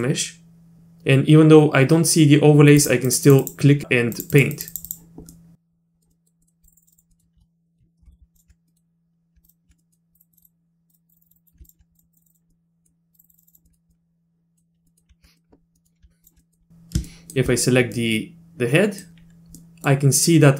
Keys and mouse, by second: 0.1 middle click, 2.8 click, 3.1 click, 3.3 click, 3.4 click, 4.2 click, 4.3 click, 4.5 click, 4.7 click, 4.9 click, 5.3 middle click, 6.1 middle click, 6.4 middle click, 6.6 click, 6.7 click, 6.8 click, 6.9 click, 7.1 middle click, 8.1 z, 8.4 ctrl+click, 8.7 click, 9.4 ctrl+click, 9.8 click, 10.1 click, 10.3 click, 10.4 click, 10.9 click, 11.1 click, 11.2 click, 11.3 click, 11.4 click, 11.6 ctrl+click, 11.9 click, 12.1 click, 12.3 click, 12.5 middle click, 13.1 click, 13.2 click, 13.3 click, 13.5 click, 13.7 middle click, 13.9 middle click, 14.9 middle click, 15.3 middle click, 15.7 middle click, 16.2 ctrl+click, 16.4 middle click, 17.1 shift+click, 18.0-19.1 middle drag, 19.6 middle click.